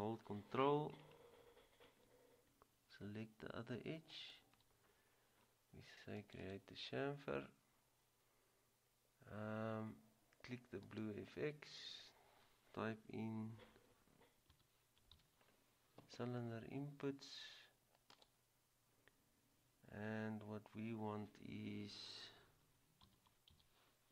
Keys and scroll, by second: 14.6-15.2 typing, 23.2-23.6 typing.